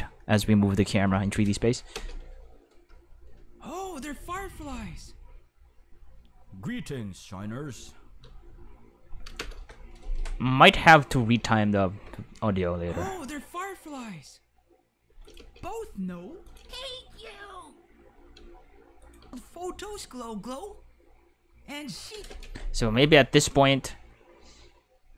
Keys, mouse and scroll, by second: 1.9 space, 2.0 5, 8.2 space, 8.3 5, 11.2 space, 15.1 space, 15.2 click, 15.3 space, 16.3 space, 16.5 click, 16.6 space, 18.3 space, 19.0 click, 19.2 space, 22.1 space, 22.7 b, 23.0 z.